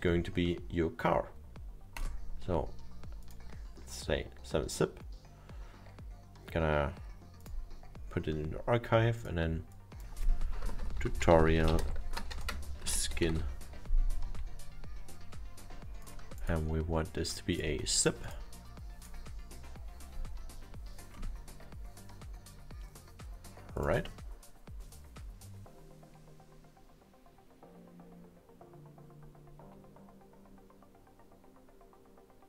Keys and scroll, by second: 10.6-13.9 typing.